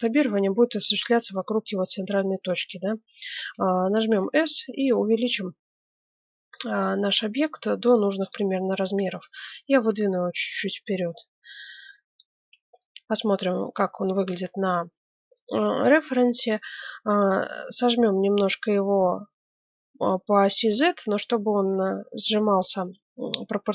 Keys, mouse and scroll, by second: 3.9 s, 8.9-10.6 drag, 12.5 z.